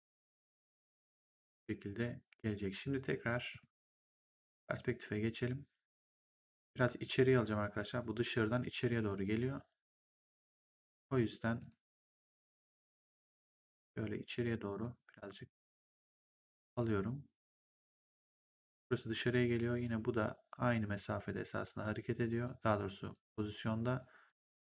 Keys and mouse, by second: 3.4 right click, 4.1 click, 10.8 click, 15.6 click, 22.3 click, 24.2 click.